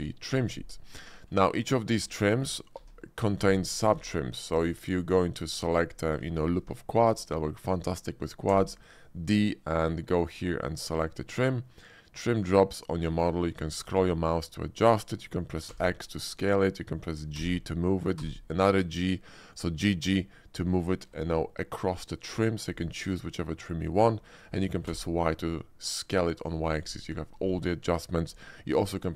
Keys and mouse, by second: 2.7 ctrl+r, 3.3 click, 3.8 Tab, 4.4 alt+click, 4.8 middle click, 5.3 alt+click, 5.8 shift+middle click, 6.2 shift+middle click, 6.9 shift+click, 8.4 d, 15.8 x, 17.4 g, 18.2 g, 24.9 y.